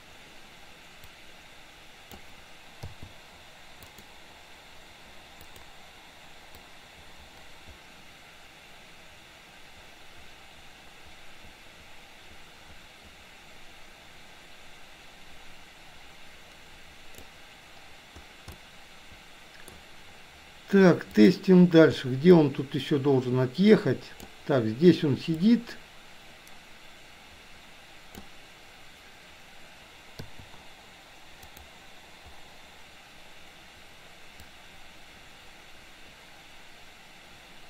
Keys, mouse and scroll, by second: 1.3-2.4 drag, 3.9 click, 5.5 click, 6.8-17.5 drag, 18.6-19.7 middle drag, 21.3 click, 22.6-24.5 drag, 25.5-28.3 drag, 31.6 click, 34.5-37.6 drag.